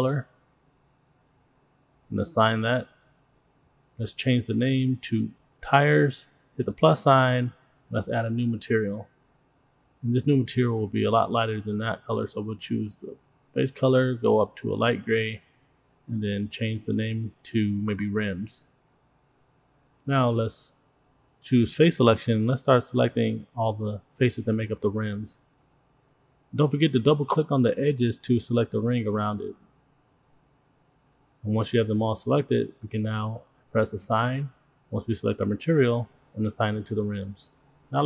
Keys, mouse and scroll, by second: 2.0 click, 2.8 click, 3.0 click, 3.2-5.6 drag, 7.3 click, 10.9 click, 13.2 click, 15.8 click, 15.9-19.4 drag, 17.7 BackSpace, 22.3 middle click, 23.1-23.6 scroll up 5, 23.6 middle click, 24.1 click, 24.4 click, 24.8 shift+click, 24.9 shift+click, 25.0 shift+click, 25.0 shift+click, 25.3 shift+click, 25.6 shift+click, 25.8 shift+click, 25.9 scroll down 2, 26.0 middle click, 26.3 middle click, 26.4 scroll up 2, 26.5 shift+middle click, 26.7 middle click, 27.2 shift+click, 27.4 shift+click, 27.5 shift+click, 27.6 shift+click, 27.7 shift+click, 27.8 shift+click, 27.9 scroll down 2, 28.0 middle click, 28.1 scroll up 2, 28.3 shift+middle click, 28.7 scroll up 1, 29.0 shift+click, 29.0 shift+click, 29.1 shift+click, 29.3 shift+click, 29.6 shift+click, 29.6 shift+click, 29.8 scroll down 2, 29.9 middle click, 30.1 scroll up 2, 30.3 middle click, 30.8 shift+click, 31.0 shift+click, 31.2 shift+click, 31.3 shift+click, 31.5-32.4 scroll down 3, 32.4 middle click, 34.8 click, 36.7 click.